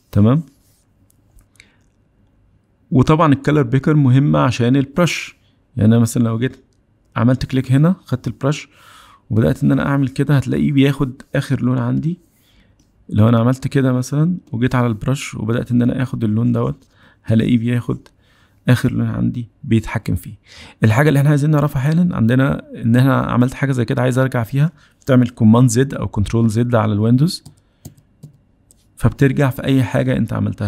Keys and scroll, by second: 3.9 b, 24.4 super+z, 27.0 super+z, 27.5 super+z, 28.1 super+z, 28.6 super+z, 29.1 super+z, 29.5 super+z.